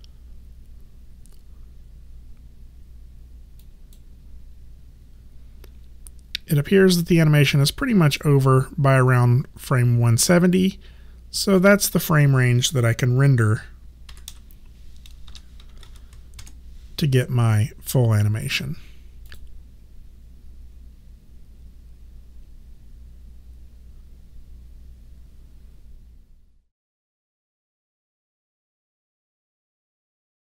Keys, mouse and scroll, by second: 3.6 click, 6.8 click, 11.6 click, 14.1-15.9 typing, 16.4 Return, 16.4 KP_Enter, 18.6 click.